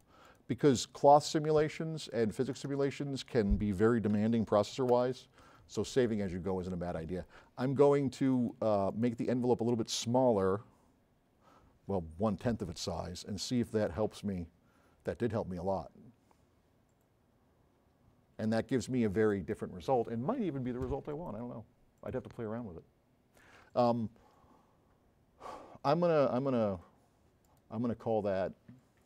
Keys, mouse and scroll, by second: 2.2 Left, 3.3 BackSpace, 4.1 2, 4.9 Return, 8.4 click, 8.9 click, 10.4 KP_0, 13.7 click, 29.0 click.